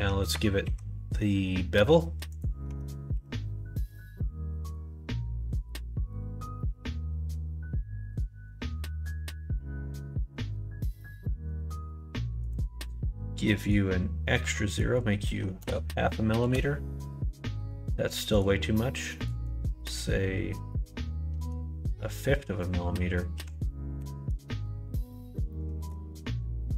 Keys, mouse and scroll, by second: 0.3 Tab, 0.6 q, 2.3 click, 2.6 Tab, 3.1 q, 13.7-17.7 drag, 18.4-25.0 drag, 25.5 middle click.